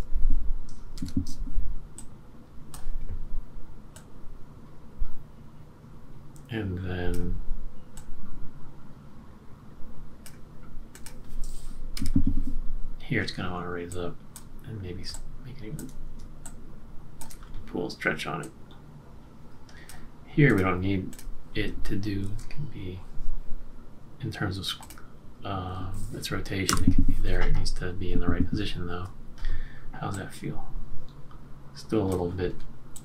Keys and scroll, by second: 0.9 F6, 1.0 super+=, 11.9 F6, 22.2 shift+F6, 26.7 F6, 27.9-28.2 shift+Up, 28.1 shift+Up, 28.4 shift+Up.